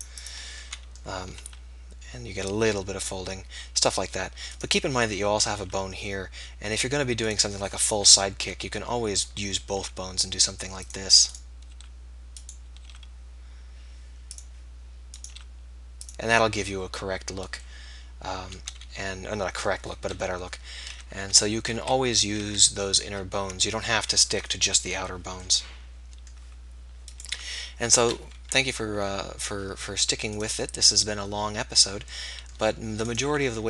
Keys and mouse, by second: 1.5-4.7 drag, 1.5 r, 5.7-6.7 middle drag, 6.7-7.9 drag, 7.9 KP_3, 8.7 KP_1, 9.7 r, 10.9-13.1 drag, 12.9 r, 14.4-16.8 drag, 15.4 r, 21.0 ctrl+z, 21.3 ctrl+z, 21.9 ctrl+z, 22.5 ctrl+z, 23.1 ctrl+z, 25.9-30.4 drag, 27.2 r, 30.4-33.6 middle drag.